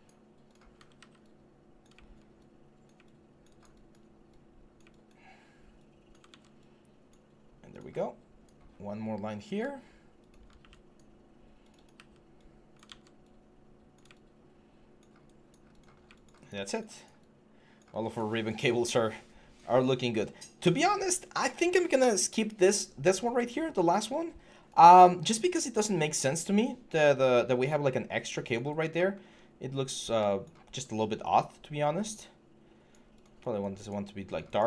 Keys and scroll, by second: 0.8 ctrl+d, 6.1 ctrl+z, 12.7 ctrl+z.